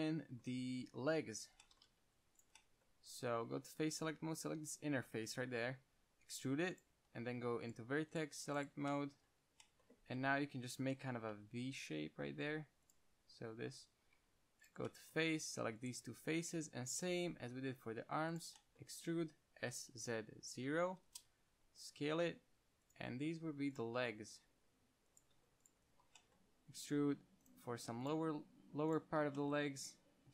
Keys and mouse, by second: 1.4 KP_1, 2.3 ctrl+Tab, 3.4-4.5 drag, 5.9 KP_1, 6.3 e, 7.1-8.2 drag, 7.5 ctrl+Tab, 8.2 z, 8.6 c, 9.1 z, 9.2-10.4 middle drag, 10.4 click, 11.2 KP_1, 11.5 g, 13.2-14.4 drag, 14.5 ctrl+Tab, 17.1 KP_1, 17.7 e, 18.7-20.9 drag, 19.4 s, 21.8 g, 23.2-25.3 drag, 23.6 s, 24.3 g, 25.6 s, 27.1 e, 27.9 g, 28.6 s, 29.7-30.3 drag.